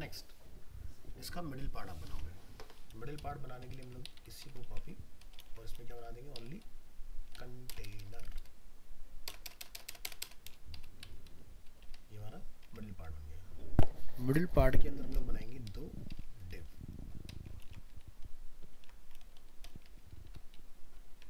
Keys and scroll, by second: 2.1 alt+Tab, 4.6 ctrl+c, 5.4 ctrl+v, 17.6 ctrl+c, 18.7 ctrl+v.